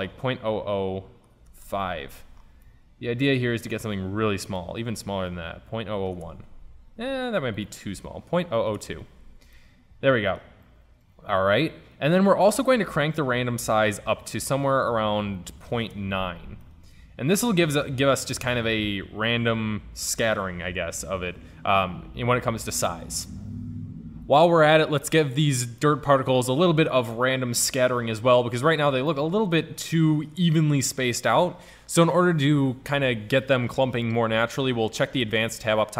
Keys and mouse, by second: 2.3 middle click, 2.9 middle click, 5.9 KP_0, 8.6 KP_0, 8.8 middle click, 12.0-14.0 drag, 14.9-16.4 drag, 17.0-18.1 middle drag, 25.5 middle click, 29.7 middle drag.